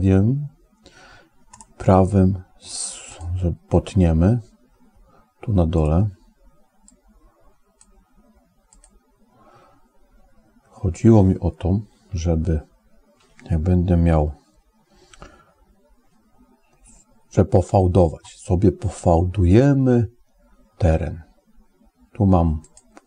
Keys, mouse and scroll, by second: 1.5-3.1 right drag, 6.7 click, 11.9 KP_1, 22.5 click.